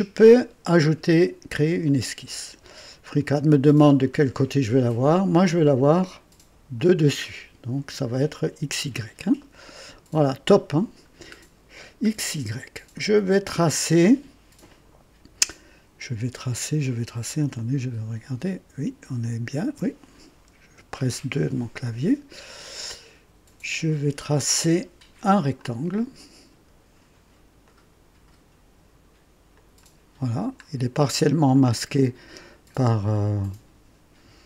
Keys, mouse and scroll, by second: 1.8 click, 3.1-3.4 scroll down 2, 3.8-4.1 scroll down 2, 6.7 click, 9.4-10.4 right drag, 11.3 scroll up 2, 12.0 scroll up 1, 13.0-13.8 right drag, 14.1 scroll up 1, 17.6-20.0 ctrl+alt+drag, 20.8 KP_2, 22.8-23.7 right drag, 25.5 click, 27.6 click, 29.5 click, 30.6-31.0 scroll up 1, 31.5 right click.